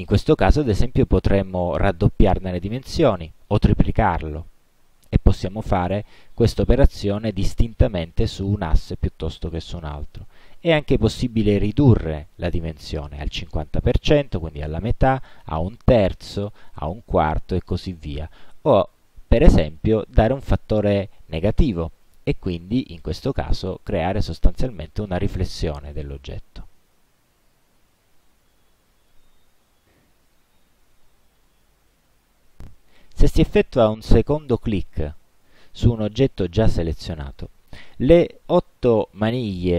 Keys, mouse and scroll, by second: 27.5-29.4 alt+drag, 35.0 click.